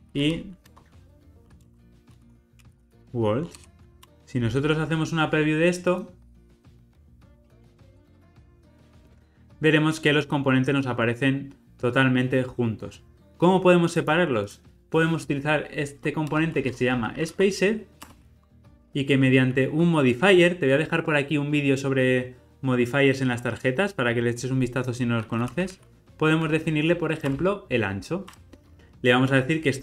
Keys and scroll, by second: 18.0 Return, 27.3 Return.